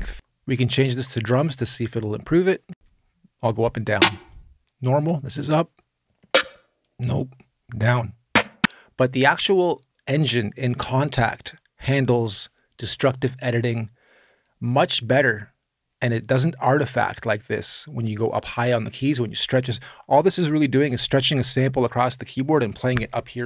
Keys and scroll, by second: 2.5 space.